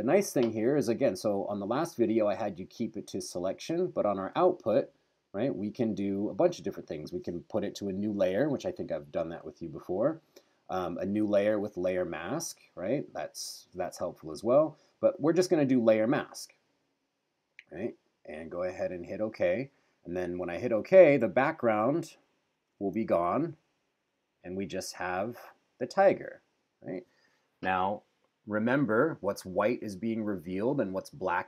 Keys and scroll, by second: 23.2 super+-.